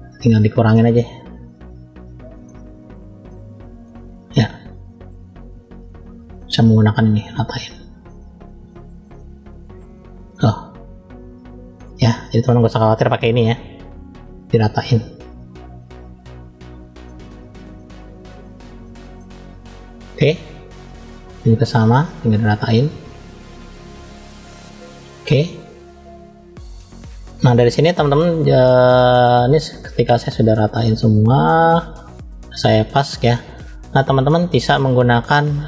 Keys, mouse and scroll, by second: 0.8 click, 2.2 middle click, 2.4 scroll up 2, 3.2 middle click, 4.0 scroll down 1, 4.9 click, 5.7 middle click, 6.7-7.8 drag, 8.0 middle click, 8.9 click, 10.3-11.6 middle drag, 12.4 shift+middle click, 14.3 middle click, 15.8 click, 17.0 middle click, 18.0 click, 19.1 middle click, 20.3 scroll down 1, 21.2 shift+middle click, 22.0 middle click, 23.0 click, 24.0 middle click, 24.8 middle click, 26.0-27.7 middle drag, 29.3-29.9 scroll up 1, 30.2 click, 31.1 click, 31.9 shift+middle click.